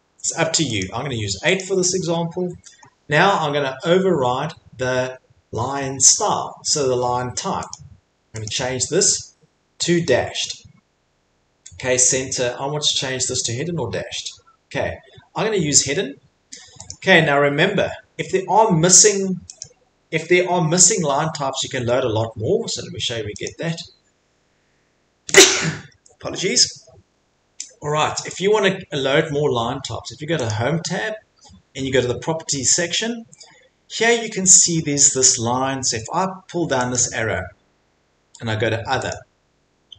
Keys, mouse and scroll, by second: 0.8 click, 1.5 click, 7.7 click, 8.5 click, 16.9 click, 21.7 Escape, 23.4 click, 27.5-28.6 drag, 30.5-38.0 drag.